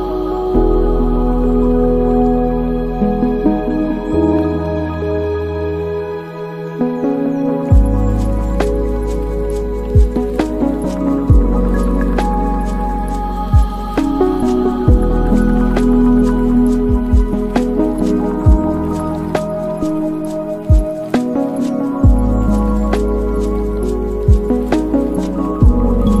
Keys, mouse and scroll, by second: 0.7-3.4 drag, 3.4 space, 4.5 space, 5.2-7.2 drag, 7.2 middle click, 8.0 shift+a, 10.9 drag, 12.8 middle click, 13.8 shift+a, 19.2 click, 20.3 middle click, 20.9 shift+a, 23.6-26.2 middle drag.